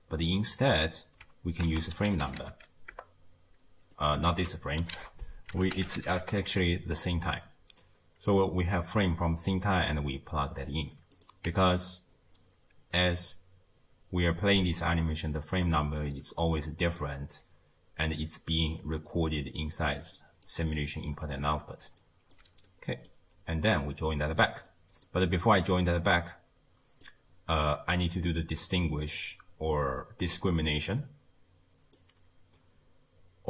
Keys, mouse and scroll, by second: 1.7 ctrl+a, 4.4 x, 5.0 ctrl+a, 8.3 click, 11.2 click, 11.5 x, 16.5 d, 16.6 click, 17.0-17.4 d, 19.9 d, 20.2 click, 20.5 d, 21.8 d, 22.0 right click, 22.3 d, 22.5 d, 22.7-23.8 middle drag, 23.8 click, 24.7 middle click, 25.4-27.9 drag, 28.3 click, 31.0-33.2 drag.